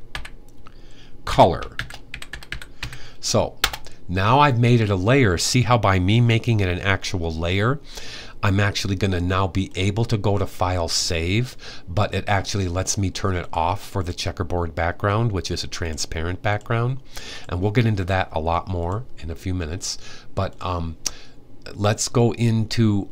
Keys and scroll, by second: 0.0-3.1 typing.